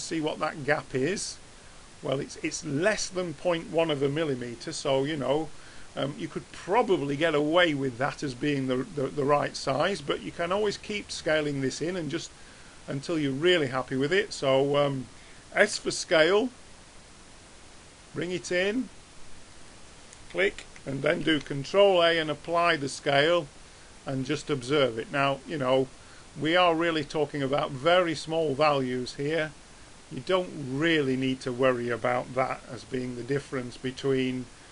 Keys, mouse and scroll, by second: 4.9-6.7 middle drag, 9.5-10.7 middle drag, 10.9-13.5 middle drag, 12.0-13.7 drag, 15.7 s, 21.2 ctrl+a, 24.3-28.3 middle drag, 28.3-31.6 drag, 32.7-34.7 middle drag.